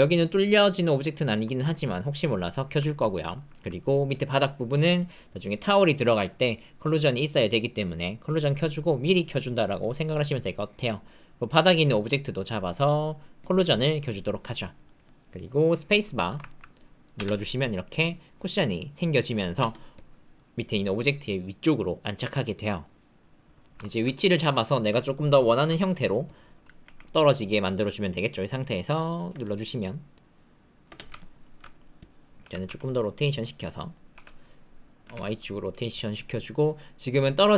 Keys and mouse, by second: 1.1 shift+middle click, 1.4 middle click, 2.8 ctrl+shift+middle click, 3.1 shift+middle click, 3.5 ctrl+middle click, 14.5 click, 16.2 shift+middle click, 16.4 ctrl+middle click, 17.1 space, 19.6 space, 20.3-22.8 middle drag, 23.6 shift+middle click, 23.8 ctrl+middle click, 24.1 middle click, 25.0 alt+click, 26.8 g, 28.0 click, 29.3 space, 30.8 space, 31.1 alt+click, 32.4 r, 33.6 middle click, 34.1 r, 36.7 click, 37.1 click.